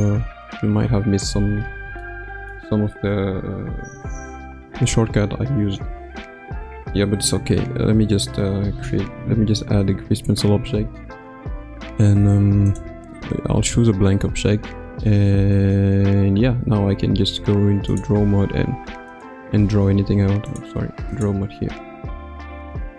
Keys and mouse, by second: 2.0 shift+middle click, 8.9 shift+a, 17.9-19.3 drag, 20.5-22.9 drag.